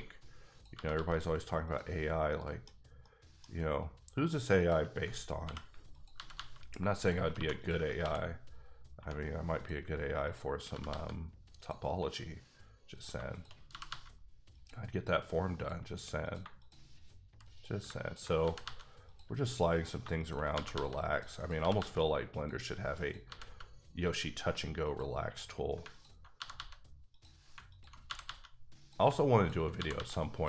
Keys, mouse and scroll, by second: 0.5 click, 0.7 g, 0.9 g, 1.6 click, 2.0 scroll down 2, 2.3 middle click, 3.0 middle click, 3.4-4.1 scroll up 2, 4.6 shift+click, 4.9 click, 5.4 j, 5.9 click, 6.3 g, 7.0 click, 7.3 2, 7.6 click, 8.0 ctrl+x, 8.5 scroll down 2, 9.0 1, 9.2 scroll up 2, 9.6 click, 10.7 g, 10.8 g, 11.6 click, 12.9 click, 13.7 g, 13.8 g, 14.5 click, 15.5 click, 16.4 click, 16.6 shift+click, 18.4 g, 18.6 g, 19.0 click, 19.7 click, 20.2 shift+click, 20.5 g, 20.7 g, 21.1 click, 21.4 double click, 21.6 g, 21.7 g, 22.3 click, 23.0 click, 23.2 g, 23.4 g, 24.8 click, 26.3 g, 26.5 g, 27.1 click, 28.1 g, 28.2 g, 28.8 click, 29.8 g, 29.9 g, 30.3 click.